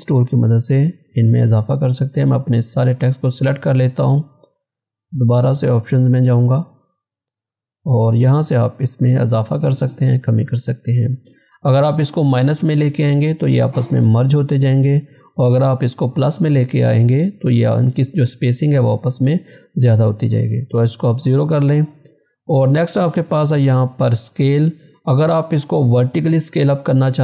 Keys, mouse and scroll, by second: 7.5 click, 21.3 click, 26.9 click.